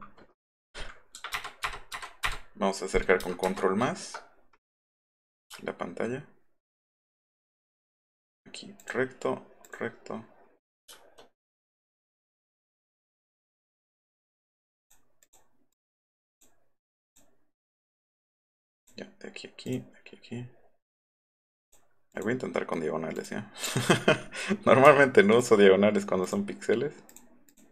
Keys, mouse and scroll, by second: 6.7 shift+click, 8.8 shift+click, 9.6 shift+click, 12.0 click, 12.5 click, 13.4 click, 13.9 click, 14.8 click, 15.2 click, 15.8 click, 16.3 click, 17.1 click, 17.7 click, 18.8 click, 19.7 click, 21.0 click, 21.6 click, 22.1 click, 23.2 click, 23.4 scroll down 1, 25.4 shift+click, 26.2 click, 27.1 click, 27.5 click.